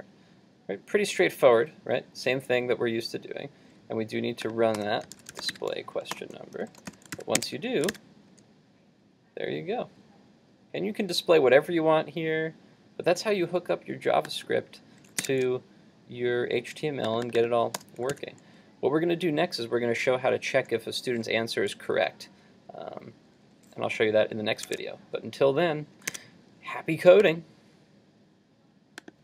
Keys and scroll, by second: 7.2 super+s, 7.5 super+Tab, 7.9 super+r, 15.3 super+Tab, 18.2 super+s, 24.7 super+Tab.